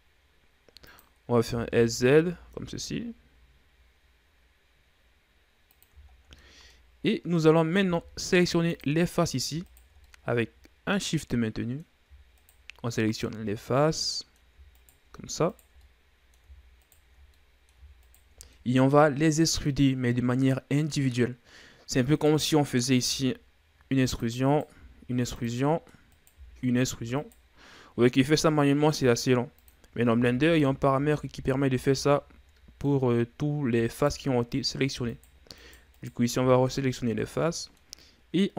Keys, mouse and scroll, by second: 2.0 s, 6.7 shift+scroll down 4, 6.9 middle click, 7.4-8.3 scroll up 1, 8.3 ctrl+Tab, 9.6 right click, 10.2 shift+right click, 10.6-12.9 middle drag, 12.9 shift+right click, 13.6 shift+right click, 14.3-15.3 middle drag, 15.3 shift+right click, 16.0 shift+right click, 16.3-17.3 middle drag, 17.3 shift+right click, 17.9 middle click, 18.5 shift+right click, 19.1-22.0 middle drag, 22.7 right click, 23.6 e, 25.0 right click, 25.3 e, 26.2 middle click, 26.6 right click, 26.8 e, 29.4 g, 30.7 ctrl+z, 30.9 ctrl+z, 31.1 ctrl+z, 31.5 ctrl+z, 31.9 ctrl+z, 32.2 ctrl+z, 32.6-34.4 middle drag, 34.4 alt+right click, 35.6 alt+right click, 36.1 alt+right click, 36.4 alt+right click, 37.7-38.5 middle drag.